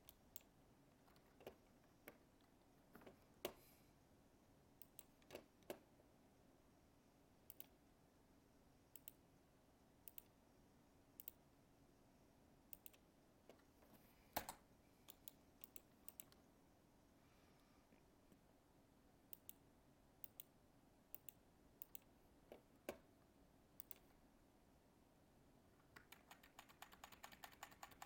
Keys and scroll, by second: 26.1 ctrl+z.